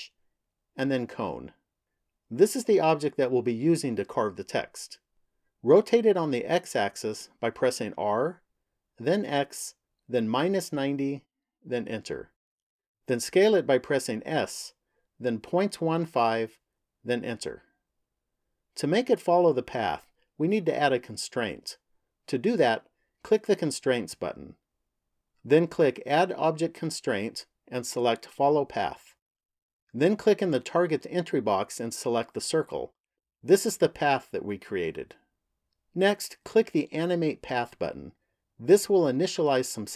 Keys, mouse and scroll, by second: 7.7 r, 14.2 s, 23.3 click, 25.8 click, 31.3 click, 36.9 click, 37.7 click.